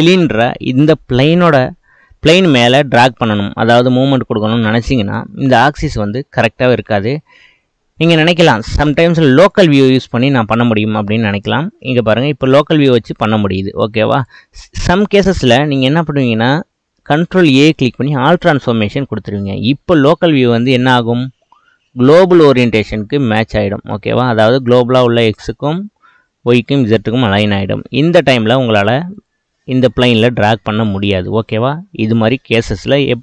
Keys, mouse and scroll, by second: 8.0-10.3 drag, 10.3-12.6 middle drag, 12.6 click, 14.5-17.3 middle drag, 17.3 ctrl+a, 19.9 click, 20.5-21.0 middle drag, 21.0 click, 21.5-25.5 middle drag, 27.8-28.8 middle drag, 28.8 click, 29.2 click, 29.7-32.8 middle drag.